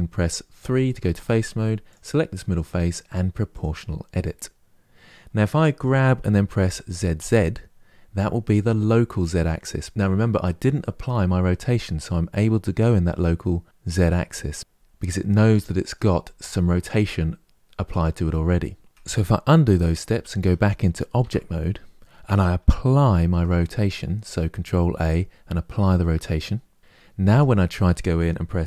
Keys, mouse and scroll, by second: 0.4 3, 1.6 click, 3.2 click, 5.5 g, 14.8-15.8 middle drag, 15.8-18.8 scroll down 1, 20.9 Tab, 22.8 ctrl+a, 27.0 Tab, 28.5 g.